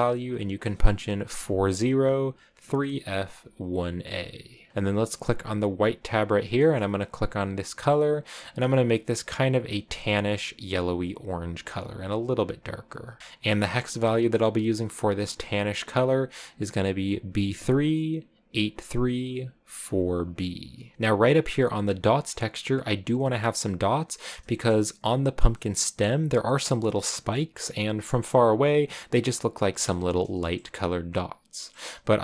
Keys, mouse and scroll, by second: 1.0-3.7 drag, 3.7 middle click, 4.5 middle click, 4.7-5.6 scroll up 3, 5.7 click, 6.4-7.5 middle drag, 7.5 click, 13.2 scroll up 2, 14.8 click, 17.8-20.1 drag, 20.9-24.3 drag, 24.3 shift+middle click, 24.4 middle click, 26.9-27.9 middle drag.